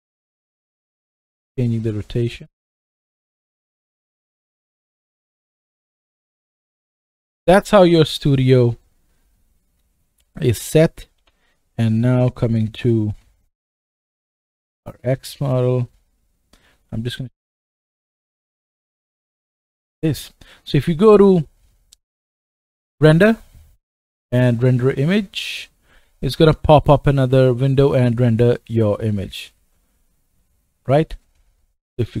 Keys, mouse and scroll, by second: 0.2 middle click, 0.7-7.7 right drag, 6.2 KP_0, 7.0 middle click, 7.7-8.2 middle drag, 8.2-11.2 right drag, 10.3 click, 10.3 middle click, 11.2 g, 18.6 KP_0, 23.1 click, 23.6-32.2 middle drag, 28.1-32.2 drag, 28.1-32.2 right drag.